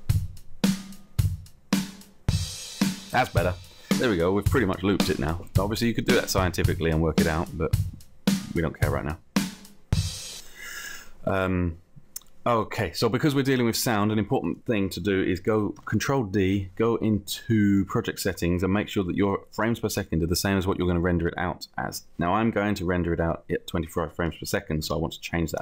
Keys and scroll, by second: 15.9 ctrl+d, 24.8 5.